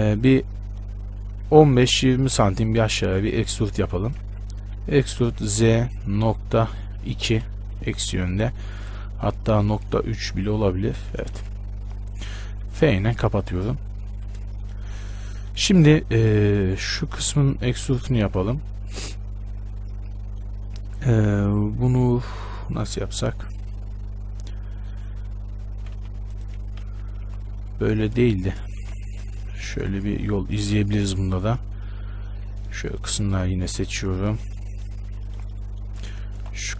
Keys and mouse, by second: 0.0 shift+space, 4.5 z, 4.8 e, 11.6 z, 12.8 f, 13.0 z, 14.2 Tab, 16.6 Tab, 17.6 right click, 18.3 right click, 25.4 e, 27.0 KP_1, 27.4 z, 29.0 ctrl+z, 30.0 z, 32.8-36.7 middle drag.